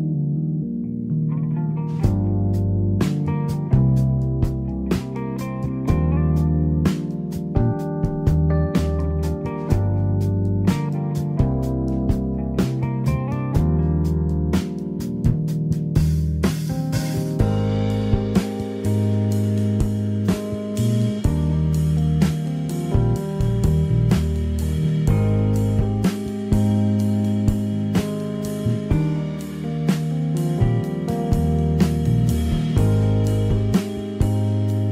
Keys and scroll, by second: 0.0 Escape, 9.3 Escape, 11.6 Escape, 15.9 Escape, 21.9 Escape, 24.8 Escape, 25.5 l, 29.2 Escape, 34.4 Escape.